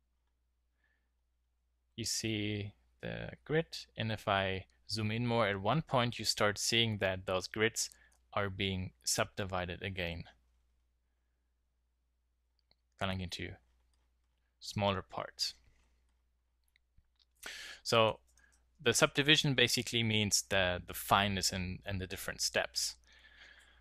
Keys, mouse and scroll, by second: 18.9 click, 19.0 middle drag, 23.6 KP_Decimal.